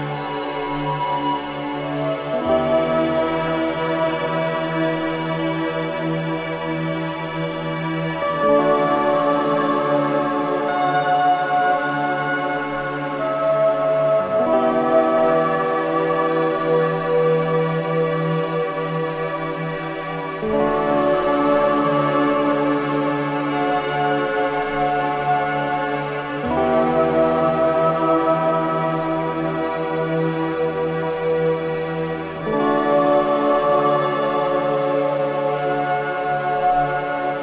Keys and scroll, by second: 5.5 F2, 7.8 F3, 9.4 ctrl+g, 10.0 c, 13.7 F4, 14.6 Escape, 16.1 F3, 16.5 F2, 18.8 space, 37.2 Escape.